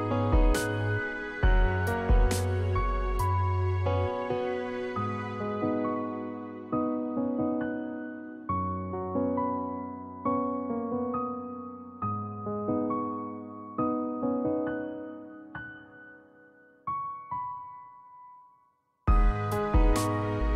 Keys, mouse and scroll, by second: 9.1 shift+a.